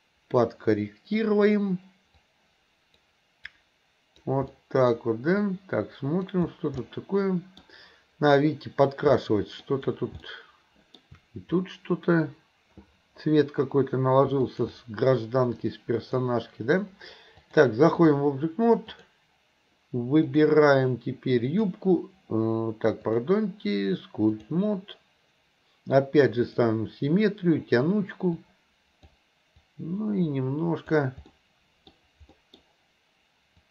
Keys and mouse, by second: 0.3 middle click, 2.2 click, 3.5 click, 4.5 middle click, 5.5 click, 6.8 middle click, 9.2 middle click, 10.2 shift+middle click, 14.4 alt+click, 15.6 click, 17.4-18.2 drag, 18.9 click, 20.4 click, 23.0 click, 26.5 click, 28.3 click, 29.7-31.0 drag, 31.3 middle click, 32.3 middle click, 33.6-33.7 drag.